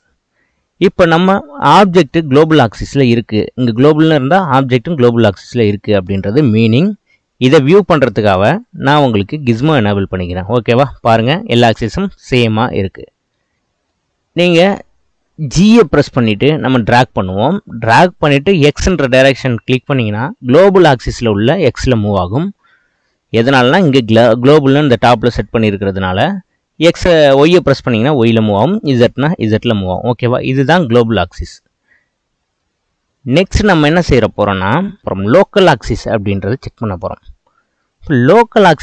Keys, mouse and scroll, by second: 1.0 click, 1.8-4.8 shift+middle drag, 8.5-10.5 drag, 10.5-12.1 middle drag, 12.1-12.7 scroll up 1, 12.7-15.7 shift+middle drag, 15.7 g, 32.6-35.0 middle drag, 35.0 click, 37.8-38.8 middle drag.